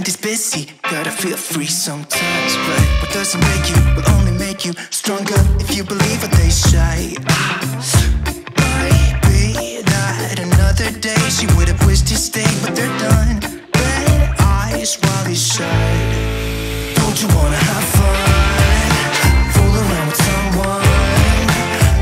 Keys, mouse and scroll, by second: 2.8 Return, 2.8 Left, 3.7 click, 13.4 click, 17.0 click, 19.5 scroll down 1, 20.2 scroll.